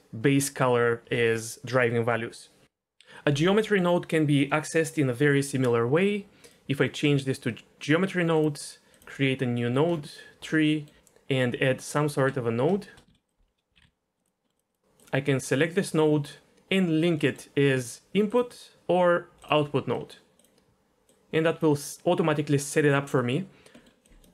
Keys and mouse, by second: 6.5-8.4 drag, 8.9 click, 9.6 middle click, 10.7 middle click, 11.0 shift+a, 12.1 shift+a, 13.1 shift+a, 14.2 drag, 14.4 middle click, 14.5 click, 14.7 click, 15.0 click, 17.2 middle click, 18.3 click, 20.0 middle click, 20.4 drag, 21.1-21.6 drag, 22.7 middle click, 23.2 middle click, 23.8 middle click, 24.0 drag.